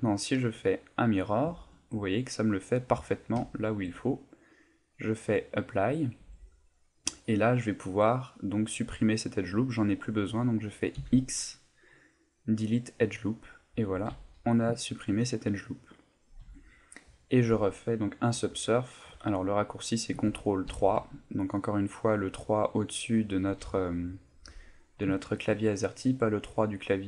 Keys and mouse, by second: 1.6 shift+middle click, 5.4 click, 6.2 Tab, 6.5 middle click, 7.3 middle click, 8.1 middle click, 11.0 x, 13.4 middle click, 14.1 a, 14.4 middle click, 14.8 ctrl+middle click, 15.3 middle click, 16.4 Tab, 16.8 middle click, 20.7 ctrl+3, 21.2 middle click, 24.6 middle click, 25.2 shift+middle click, 26.2 middle click.